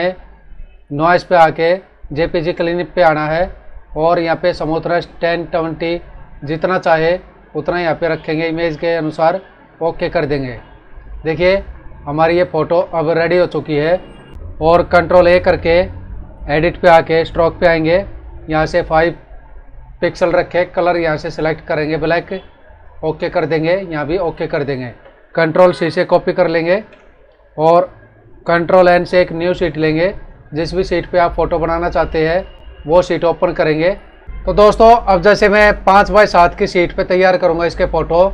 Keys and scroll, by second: 11.3 ctrl+=, 12.3 ctrl+-, 15.3 ctrl+a, 26.6 ctrl+c, 29.3 ctrl+n, 34.2 F9.